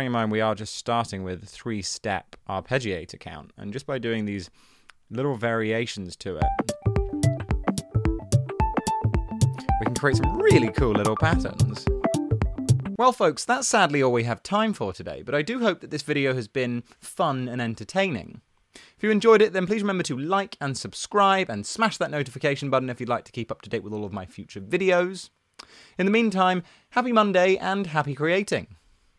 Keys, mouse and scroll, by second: 6.4 space.